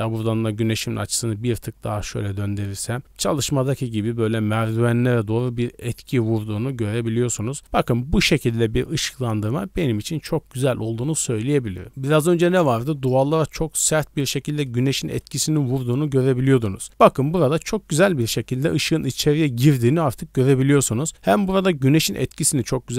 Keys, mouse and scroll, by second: 3.0-3.4 scroll down 4, 6.8 d, 7.0 right click, 13.4-17.1 typing, 14.6 click, 15.2 click, 16.8 right click.